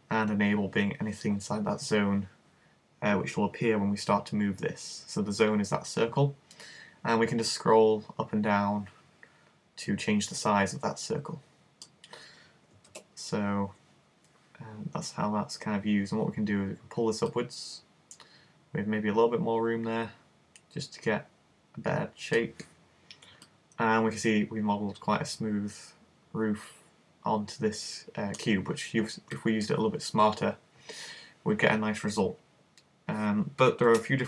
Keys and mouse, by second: 4.2 click, 13.0 super+z, 17.3 click, 19.2-22.5 middle drag, 23.5 middle click, 29.7 middle click, 33.9 super+z.